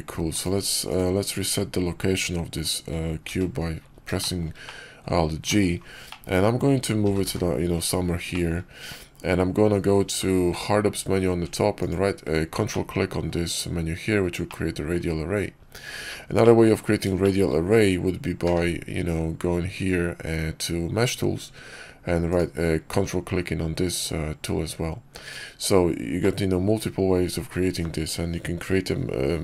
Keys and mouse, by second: 0.8-2.0 drag, 3.2 alt+g, 4.1 shift+click, 4.6-4.9 drag, 5.4 click, 6.0 click, 6.9 g, 8.2 click, 10.1 alt+w, 11.7 ctrl+click, 12.6-13.2 drag, 14.4-14.8 drag, 15.9 ctrl+z, 16.3 click, 17.1 shift+click, 18.3 q, 26.1 click, 26.1-27.4 middle drag.